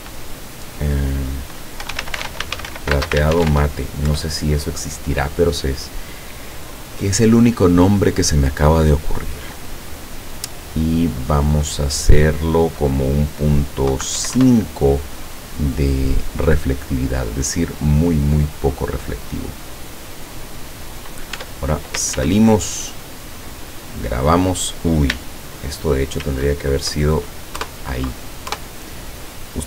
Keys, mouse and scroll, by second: 1.6-4.0 typing, 4.1 Return, 6.6 click, 9.5 click, 11.4 click, 13.9 KP_Decimal, 14.2 KP_5, 14.4 KP_Enter, 17.0-17.6 scroll up 2, 17.8-18.2 scroll down 2, 18.8 scroll up 2, 20.2-20.7 scroll down 2, 21.4 Tab, 22.2 ctrl+s, 22.5 ctrl+click, 26.3 ctrl+shift+s, 27.6 KP_Add, 28.5 KP_Enter.